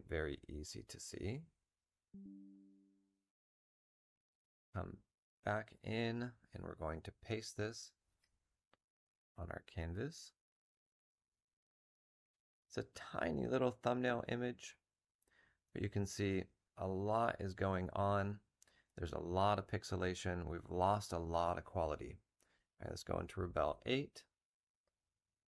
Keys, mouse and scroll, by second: 8.0 v.